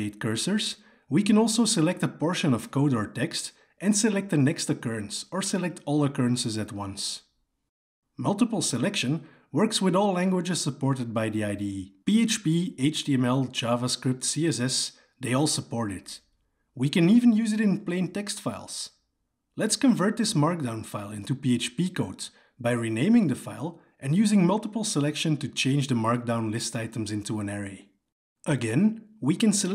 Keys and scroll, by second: 2.6 alt+j, 6.2 alt+j, 7.2 ctrl+v, 14.0 Return, 20.6 Delete, 24.8 Escape, 27.3 Escape.